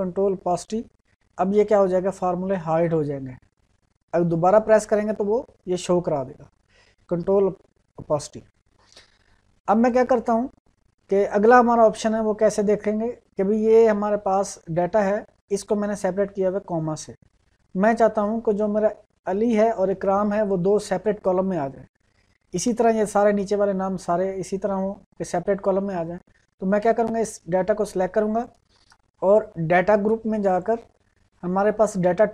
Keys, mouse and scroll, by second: 0.4 ctrl+`, 4.6 ctrl+`, 5.2 ctrl+`, 9.7 click, 12.8 click, 26.7-30.4 drag.